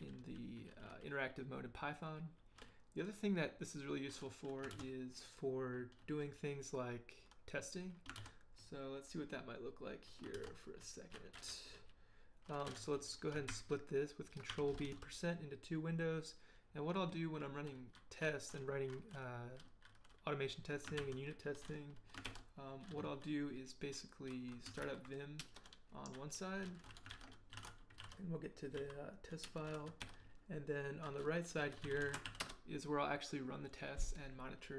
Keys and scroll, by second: 4.7 ctrl+d, 8.1 ctrl+d, 10.3 ctrl+d, 13.5 ctrl+b, 14.5 shift+5, 21.0 ctrl+h, 22.2 ctrl+l, 23.0 ctrl+h, 24.4-25.3 typing, 25.4 Return, 27.1 ctrl+p, 27.3-28.8 typing, 29.4 Return, 30.0 ctrl+l, 31.4-32.7 typing.